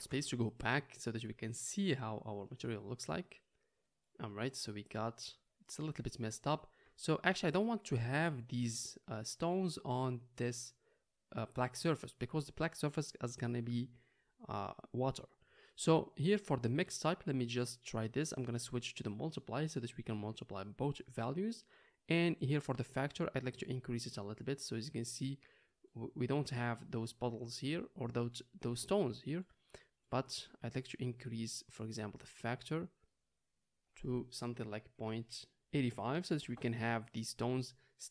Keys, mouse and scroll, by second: 4.6-6.3 middle drag, 7.2-9.6 shift+middle drag, 15.7-16.1 middle drag, 16.5 scroll up 1, 16.8-19.8 middle drag, 23.7-30.1 middle drag, 30.1-31.7 scroll up 1, 31.7-33.2 scroll up 1, 33.2 middle click, 33.8-37.4 drag, 33.8 right click, 37.4-38.1 middle drag.